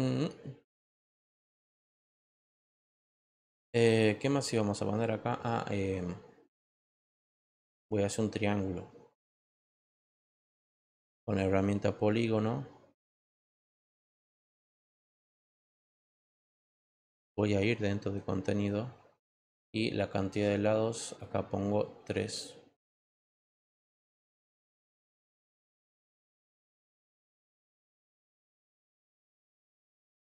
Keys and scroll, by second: 22.9 3.